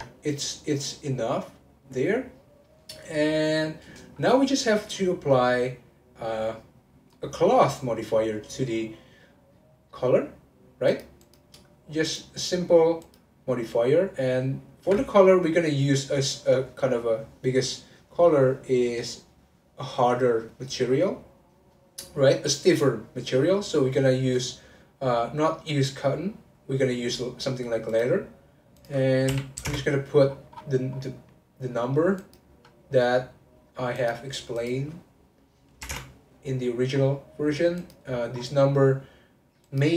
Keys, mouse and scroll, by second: 0.2-3.6 middle drag, 3.6-4.1 scroll down 2, 4.1-4.9 scroll up 1, 4.9-8.0 middle drag, 10.9 click, 11.2 click, 12.0-16.2 drag, 28.8-30.3 drag, 30.3-32.1 scroll down 15, 32.1 click, 32.7-34.0 scroll down 3, 34.0 click, 34.6-36.9 drag, 36.9-37.8 scroll down 2, 37.8 click, 38.1-39.6 scroll down 1, 39.6 click.